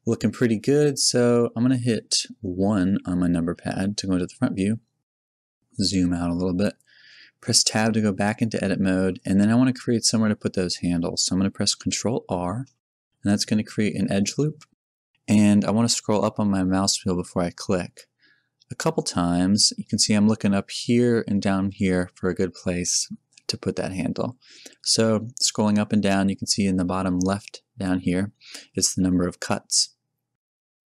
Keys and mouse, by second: 3.6 KP_1, 3.9 KP_1, 7.7 Tab, 8.6 a, 12.6 ctrl+r.